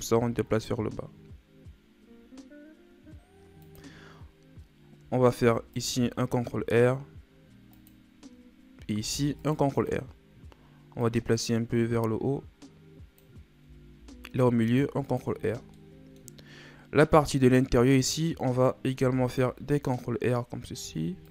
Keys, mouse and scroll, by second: 5.3 ctrl+r, 9.0 ctrl+r, 11.0-13.9 drag, 13.9 ctrl+r, 15.7 middle click, 16.4 scroll up 2, 17.4 right click, 18.9 ctrl+r.